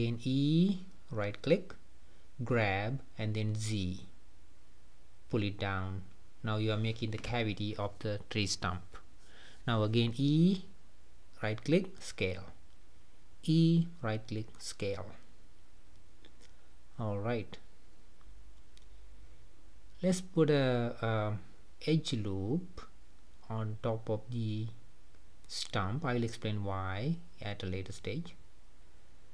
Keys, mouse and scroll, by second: 0.7 g, 4.8 middle click, 5.5 scroll up 2, 5.9-8.6 middle drag, 8.6 e, 10.1 s, 12.8 e, 13.8 s, 15.7 click, 16.1-16.4 scroll down 2, 16.4-19.0 middle drag, 19.0-21.0 drag, 21.0-21.7 scroll up 5, 22.9-26.0 drag, 27.6 click, 28.4 scroll down 2, 28.7-29.3 middle drag.